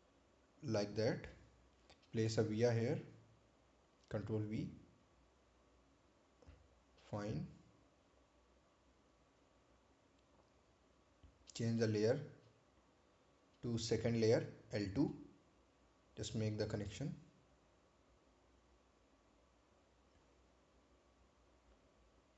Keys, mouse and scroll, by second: 0.8 click, 1.8 right click, 3.6-4.2 scroll up 1, 4.8 ctrl+v, 7.2 click, 8.0 right click, 8.7 click, 9.2-10.2 scroll down 1, 10.2-10.6 scroll up 1, 11.7 click, 16.0 click, 21.2-21.9 scroll down 1.